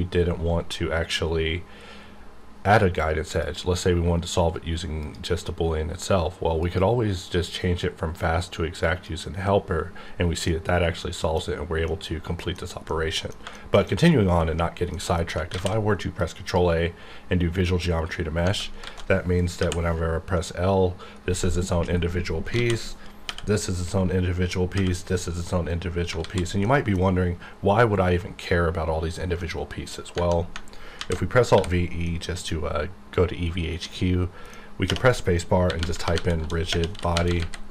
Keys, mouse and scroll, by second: 3.4 click, 8.8 click, 10.0 scroll down 1, 10.5 middle click, 11.3-11.9 scroll down 1, 11.9 middle click, 12.6 scroll down 1, 13.2 scroll down 1, 13.5 shift+middle click, 14.9 middle click, 15.5 ctrl+a, 16.2-18.4 drag, 18.4 Tab, 18.8 alt+a, 19.6 l, 22.4 l, 22.5 alt+a, 23.2 l, 26.2 alt+a, 26.6 middle click, 29.7 middle click, 31.0 alt+v, 31.5 e, 32.0 middle click, 32.5-33.8 scroll down 1, 33.8 middle click, 35.7-37.4 typing.